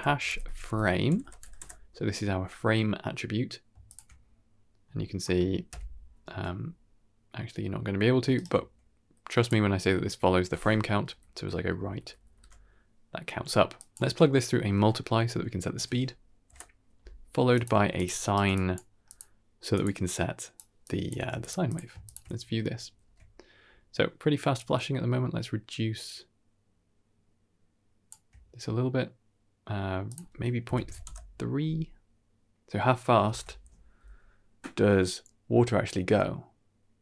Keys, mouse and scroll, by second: 1.1 BackSpace, 3.8 ctrl+shift+click, 6.0 shift+Left, 8.2 ctrl+right click, 9.2 click, 11.0 Right, 11.2 Right, 11.5 Right, 11.6 Right, 11.8 Right, 11.9 Right, 12.1 Right, 12.3 Right, 13.6-17.5 drag, 17.6 shift+d, 18.1 alt+click, 18.1 alt+right click, 18.4 click, 19.0-19.7 drag, 20.0 click, 20.7 click, 21.1 g, 21.6 click, 22.0 ctrl+shift+click, 22.9 shift+space, 24.4-27.5 shift+drag, 27.5 shift+middle click, 30.0 click, 32.5 shift+space, 33.3 shift+space.